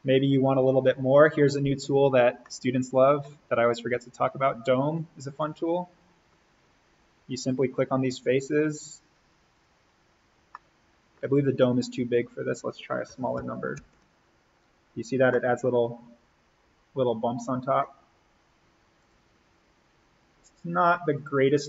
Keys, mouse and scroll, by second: 2.4-5.2 middle drag, 5.2 click, 6.0-7.2 scroll down 1, 7.2 click, 10.5-12.0 middle drag, 12.0 click, 12.8-14.2 typing, 14.8-15.3 scroll down 1, 15.3-17.9 middle drag, 17.9-18.9 scroll up 1, 18.9 click.